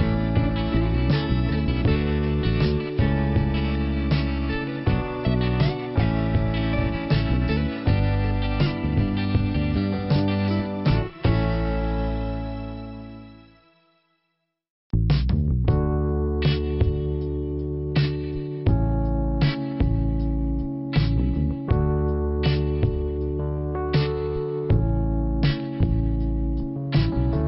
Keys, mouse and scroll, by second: 0.8 scroll down 1, 2.1 middle click, 2.7 scroll up 1, 4.1 click, 4.5 click, 7.5 click, 10.4 click, 12.2 click, 14.3 scroll up 2, 15.6 click, 17.5 click, 19.2 click, 20.8 click, 21.9 click, 22.9 click, 25.7 scroll down 2, 26.9 click.